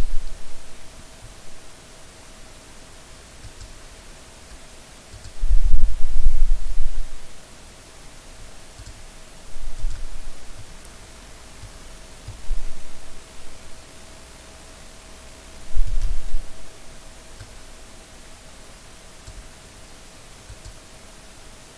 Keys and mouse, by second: 10.6-11.6 middle drag, 12.3-15.7 middle drag, 15.8 middle click, 17.5-19.2 drag, 20.5 click.